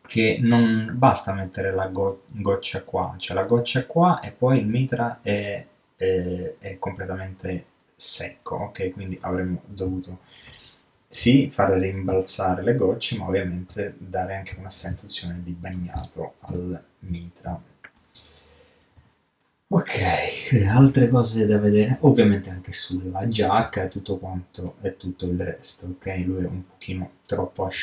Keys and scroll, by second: 9.9 ctrl+super+z.